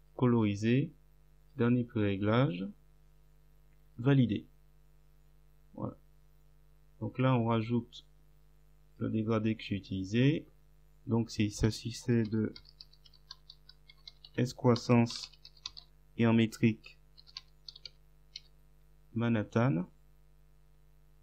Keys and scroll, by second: 11.7-18.9 typing.